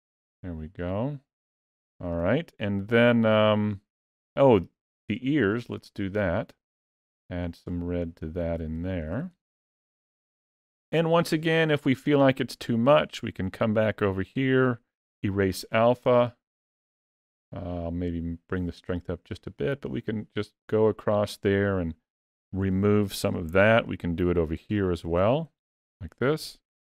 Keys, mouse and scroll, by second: 0.3 middle click, 1.5 ctrl+middle click, 2.1 middle click, 3.6 middle click, 5.0 ctrl+middle click, 5.6 shift+middle click, 6.6 click, 7.4 click, 8.0 click, 8.6 ctrl+middle click, 9.2 middle click, 9.9 ctrl+middle click, 10.5 middle click, 11.3 ctrl+middle click, 13.9 click, 17.6 click, 18.9 middle click, 20.1 click, 23.6 ctrl+middle click, 24.6 shift+middle click, 25.5 click, 26.2 click.